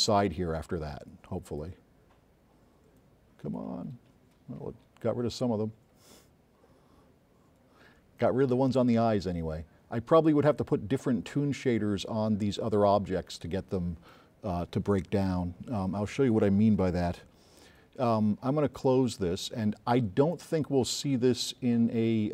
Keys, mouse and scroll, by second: 20.7 click, 22.2 click.